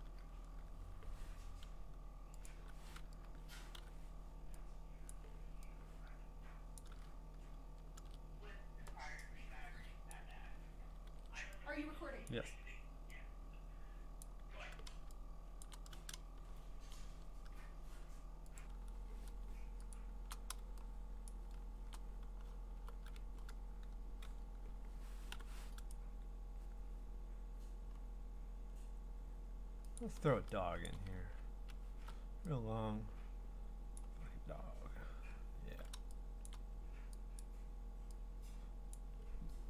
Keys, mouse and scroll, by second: 2.5 click, 2.6 u, 3.8 u, 5.1 click, 6.8 click, 8.0 ctrl+z, 10.1 click, 11.1 ctrl+z, 12.3-15.6 click, 15.4 click, 15.5 click, 15.5 click, 15.7 click, 15.8 click, 16.2-16.9 click, 16.7 click, 16.7 click, 18.6 click, 19.4 click, 19.9-20.3 click, 21.0-23.5 drag, 21.3-21.9 scroll, 22.8-23.5 b, 25.3 u, 25.9 right click, 28.0 middle click, 28.2 middle click, 28.7 middle click, 28.8 middle click, 29.3 middle click, 30.0 click, 31.2-32.0 scroll, 34.0 click, 34.6-35.7 scroll, 36.5 click, 37.4 click, 38.9 click.